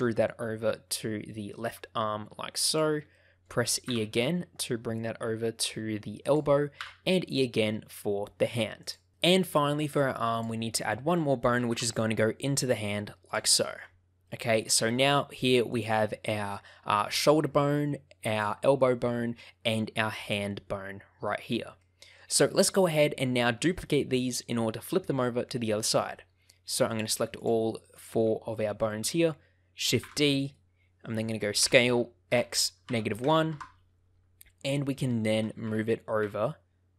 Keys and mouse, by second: 2.6 click, 3.1 shift+middle click, 3.8 e, 6.2 click, 6.7 e, 8.8 click, 11.1 shift+middle click, 11.7 e, 13.2 click, 14.2 shift+middle click, 15.6 click, 20.1 click, 21.8 shift+middle click, 26.8 shift+click, 30.0 shift+d, 30.4-31.6 right drag, 31.6 s, 32.2 x, 32.8 -, 33.2 1, 33.5 Return, 34.6 shift+click, 35.3 g, 35.6 x, 35.6 z, 36.1 x.